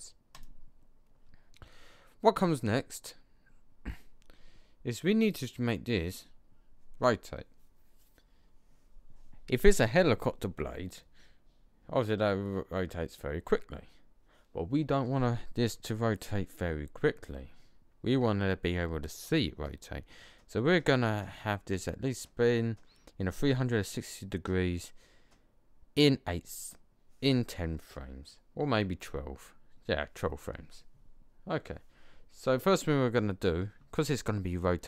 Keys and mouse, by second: 2.1 middle click, 5.2 right click.